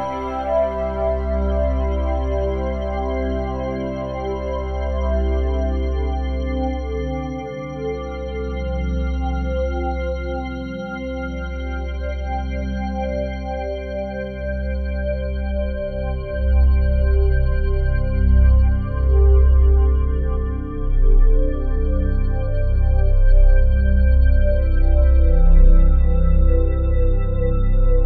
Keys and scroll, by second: 4.3 s, 6.7 s, 15.3 s, 23.9 ctrl+z.